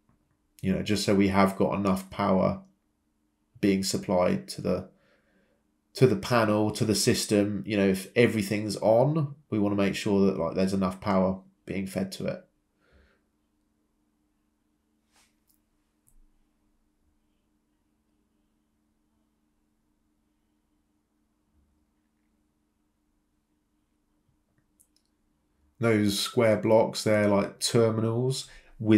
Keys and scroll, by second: 6.6 m, 7.1 Return, 12.1 typing, 14.9 ctrl+c, 14.9 ctrl+v, 19.3 m, 21.3 Return, 21.3 m, 28.6 c.